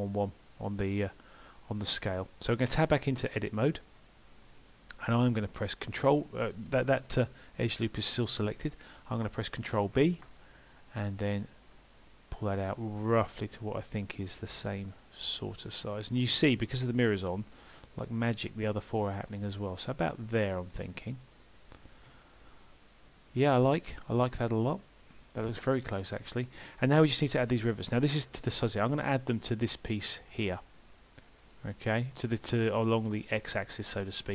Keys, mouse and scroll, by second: 4.6 middle click, 21.1 middle click, 22.1 Tab, 22.4 middle click, 26.4 middle click, 29.0 Tab, 32.9 middle click.